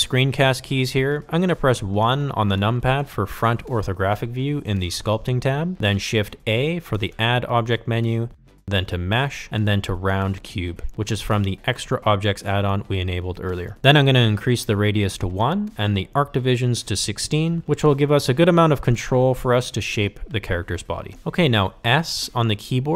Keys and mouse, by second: 1.2 KP_1, 9.1 shift+a, 16.1-18.3 drag, 18.9-20.9 drag, 22.6 s.